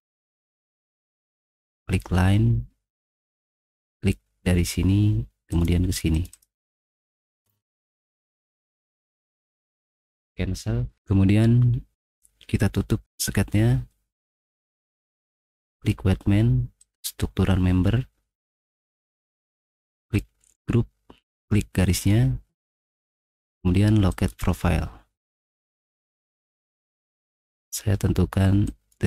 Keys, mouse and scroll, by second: 1.8 click, 3.9-5.3 drag, 5.5 click, 6.1 click, 6.3 click, 8.3 middle click, 9.7 click, 15.7 click, 16.8 click, 20.0 click, 21.4 click, 23.0 middle click, 23.0 scroll up 4, 23.2 middle click, 24.1 click, 25.2 scroll down 2, 25.7 middle click, 26.2 scroll down 2, 26.4 middle click, 26.8 middle click, 27.0 middle click, 27.3 middle click, 28.7 click.